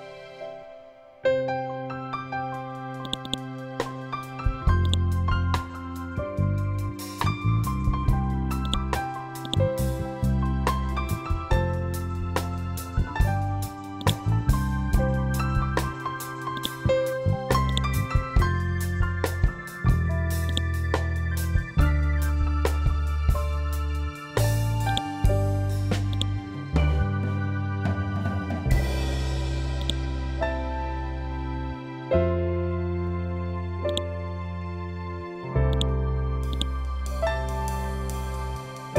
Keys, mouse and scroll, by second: 6.4 typing, 7.4 shift+Tab, 8.6 click, 13.9 click, 14.8 ctrl+z, 15.3-16.5 scroll up 1, 16.5 click, 19.1 scroll down 1, 20.4-22.0 drag, 22.0 scroll up 1, 24.8-28.1 ctrl+drag, 28.1 scroll down 1, 29.7-38.9 drag.